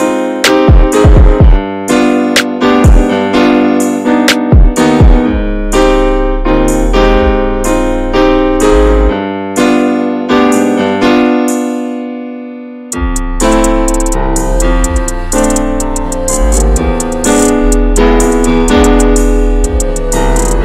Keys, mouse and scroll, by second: 0.2 alt+shift+click, 0.6 alt+shift+click, 1.3 x, 2.6 middle click, 3.3 x, 5.6 Tab, 5.7 drag, 6.0 scroll down 2, 6.2 alt+middle click, 6.4 alt+middle click, 6.6 alt+z, 6.9 ctrl+s, 7.1 Tab, 7.6 shift+middle click, 8.0 scroll up 1, 8.2-10.3 middle drag, 10.3 3, 10.4 click, 10.7 middle click, 11.6-12.0 scroll up 1, 12.0 ctrl+r, 12.8 alt+middle click, 13.5 scroll up 1, 13.6-14.7 scroll down 1, 14.7 ctrl+b.